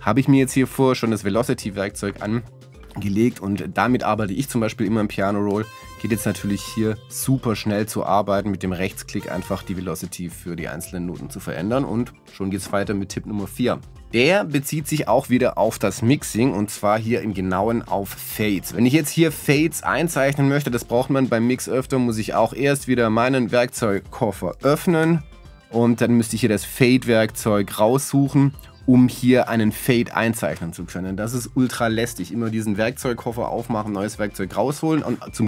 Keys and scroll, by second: 13.9 p, 25.0 w.